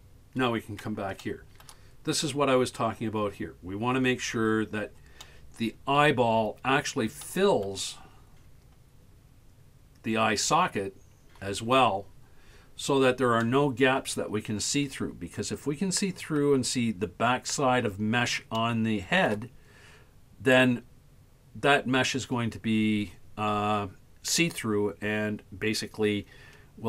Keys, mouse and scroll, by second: 1.3 shift+middle click, 2.0-3.1 scroll up 5, 5.2-6.2 middle drag, 6.2 scroll down 1, 6.9 scroll up 1, 7.3-7.7 shift+middle drag, 8.1-8.4 scroll up 4, 13.4-16.4 middle drag, 18.6-19.3 shift+middle drag, 19.7-20.2 scroll up 2, 22.9-24.2 scroll down 3, 24.2-26.8 scroll down 1.